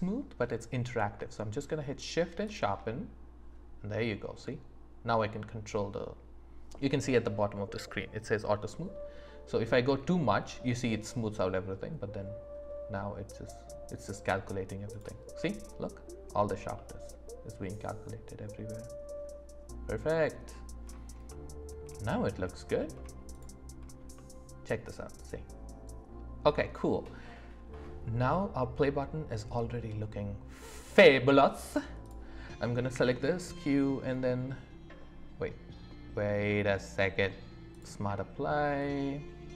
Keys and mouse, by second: 14.9 click, 16.8-20.4 drag, 16.8-20.4 right drag, 21.3 middle click, 23.3 click, 24.1-27.0 middle drag, 28.8-31.2 middle drag, 32.0 click, 32.9 q, 38.8 middle click.